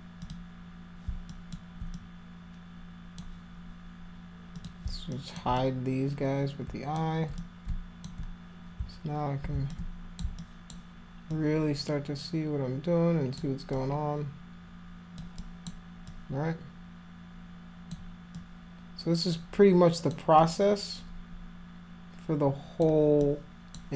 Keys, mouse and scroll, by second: 0.2 click, 1.3 alt+click, 2.0-3.2 drag, 4.6 click, 5.2 alt+click, 5.6-7.0 drag, 7.4 shift+click, 9.7 alt+click, 10.4 alt+click, 11.3-13.4 alt+drag, 13.7-15.2 alt+drag, 15.4 alt+click, 16.1-17.9 alt+drag, 18.4-20.1 alt+drag, 20.4-22.8 alt+drag, 23.3 alt+click.